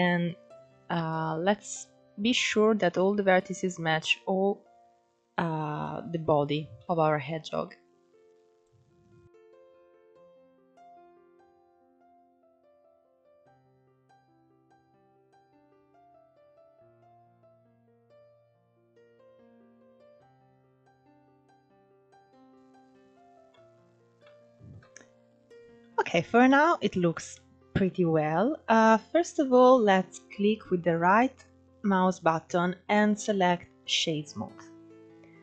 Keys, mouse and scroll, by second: 6.5 shift+middle click, 6.9-7.3 scroll up 1, 7.3 shift+middle click, 7.6 scroll up 2, 7.9 click, 9.0 click, 9.9 click, 10.1 click, 10.5 click, 10.7 click, 11.0 scroll up 3, 11.2 click, 11.8 shift+middle click, 12.0 scroll up 1, 12.1 scroll down 3, 12.2 shift+middle click, 12.4 click, 13.1 scroll down 3, 13.2 shift+middle click, 13.3 scroll up 1, 13.3 ctrl+z, 13.5 click, 13.8 shift+middle click, 13.8 scroll up 2, 14.0 click, 14.4 click, 14.7 ctrl+z, 15.6 click, 15.9 click, 16.1 click, 16.6 click, 16.8 click, 17.3 click, 18.4 scroll down 3, 18.5 shift+middle click, 18.8 scroll up 5, 19.0 shift+middle click, 19.1 click, 19.6 click, 20.1 click, 20.4 click, 20.6-21.4 scroll down 9, 20.7 shift+middle click, 21.1 middle click, 21.3 Tab, 21.4 alt+z, 21.5-22.2 middle drag, 23.9-25.7 shift+middle drag, 25.7-26.1 scroll up 1, 26.1-28.7 middle drag, 28.7-31.7 scroll up 1, 31.7-34.0 right drag, 34.0-34.3 scroll down 3, 34.3-35.4 middle drag.